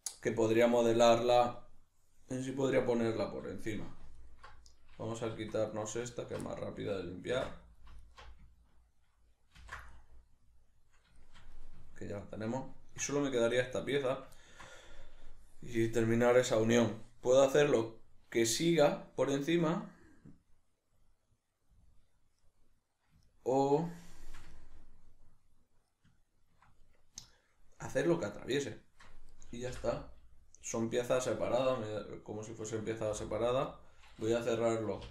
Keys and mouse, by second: 4.2 alt+right click, 5.2 2, 5.7 alt+right click, 6.2 alt+shift+right click, 6.5-8.0 middle drag, 7.4 ctrl+x, 8.0 alt+right click, 9.6 ctrl+x, 9.9-13.7 middle drag, 13.7 right click, 14.4-29.3 ctrl+middle drag, 29.3 right click, 29.7 l, 30.8-33.1 middle drag, 33.1 h, 33.7 middle click, 35.0 k.